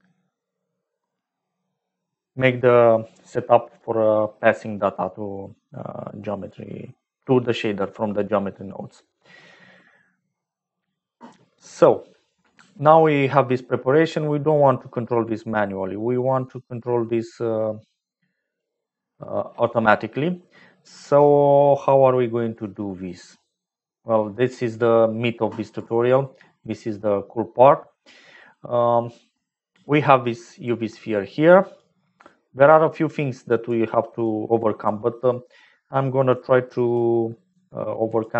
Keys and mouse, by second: 14.1-18.7 drag, 30.0 click, 31.0 click, 32.3 click, 33.2 click, 34.2 click, 36.2 click, 37.6 click.